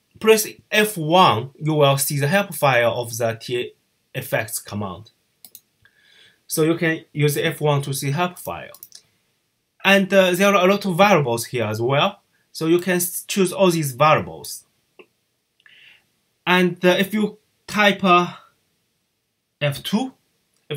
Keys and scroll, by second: 19.6 F2.